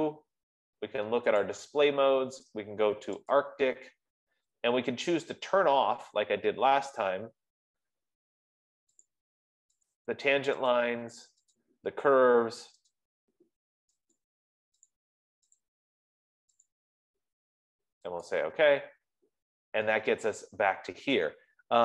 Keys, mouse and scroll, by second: 0.3 click, 0.8 F15, 1.8 click, 3.7 click, 5.8-7.2 scroll, 7.5-8.2 scroll, 9.5 click, 10.4 click, 11.3 click, 11.9 click, 13.3 click, 14.5 click, 15.5 click, 17.1 click, 18.8 click.